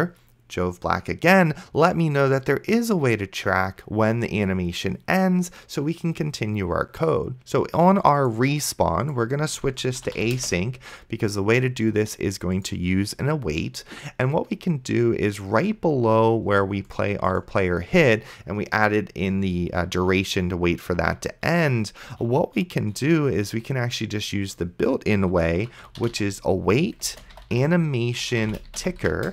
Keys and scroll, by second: 9.5-10.7 typing, 15.8 Return, 25.5-29.3 typing.